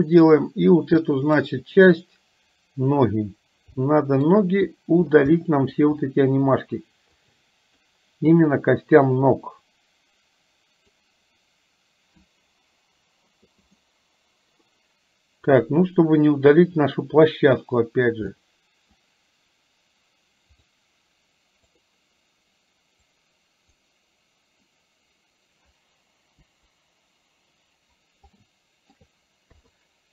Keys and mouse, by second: 3.8 shift+middle click, 5.4 shift+middle click, 7.2 click, 8.3-11.1 drag, 13.9 middle click, 15.6 click, 18.4 middle click, 20.6 click, 21.8 click, 23.1-24.2 drag, 26.6 Delete, 28.3 shift+middle click, 29.6 KP_3.